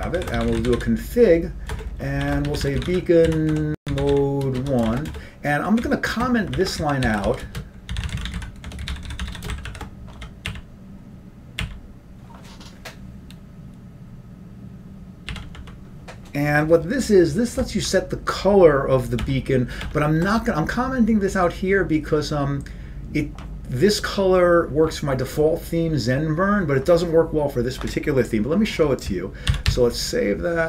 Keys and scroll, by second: 1.9-3.8 typing, 6.4-8.6 typing, 12.5-13.6 typing, 22.0 typing.